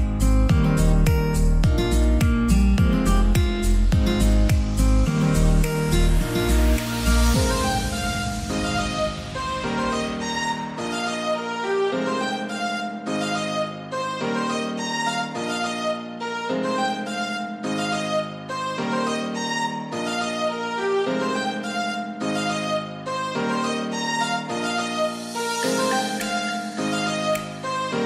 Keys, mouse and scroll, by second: 1.0 click, 12.1 click, 12.2 click, 18.9 click, 23.6-24.0 scroll down 1, 25.4-28.0 drag.